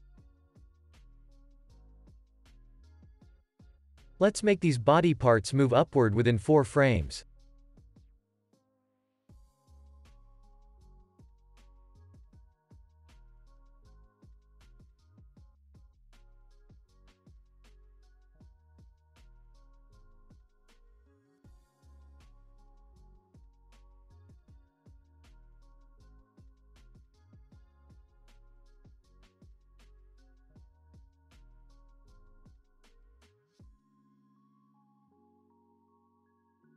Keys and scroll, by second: 7.1 space, 13.2 ctrl+s, 16.0-17.0 typing, 18.7 1, 19.2 Return, 27.8 2, 28.0 Return, 30.4 KP_Subtract, 31.0 4, 31.2 Return.